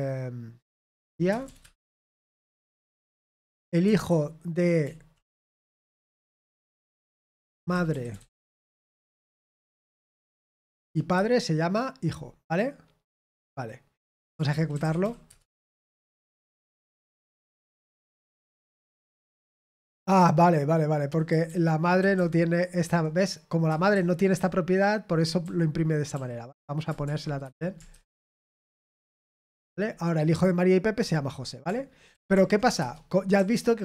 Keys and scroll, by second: 2.4-4.0 typing, 9.8-10.7 typing, 11.1 Escape, 14.4-17.3 typing, 17.3 Return, 18.9 ctrl+p, 19.1 ctrl+p, 19.6 Return, 20.1-25.0 typing, 27.4 Escape, 27.6-28.7 typing, 28.8 ctrl+p, 29.0 ctrl+p, 29.2 Return, 32.1 ctrl+p, 32.3 ctrl+p, 32.7 Return, 33.3-33.8 typing.